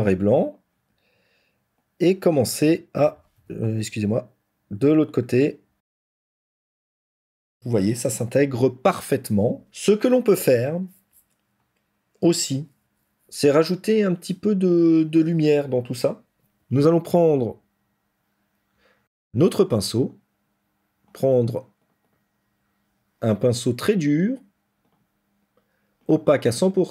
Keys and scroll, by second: 3.2 ctrl+z, 7.3 ctrl+-.